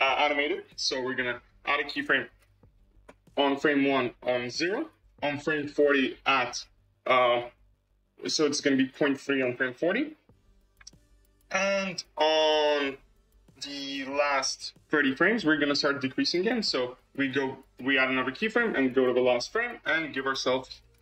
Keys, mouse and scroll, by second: 4.4 click, 5.8-9.3 drag, 11.0 click, 11.5-14.5 scroll down 11, 14.8-15.5 drag, 15.5-16.9 scroll up 16, 17.6 click, 19.2-21.0 drag.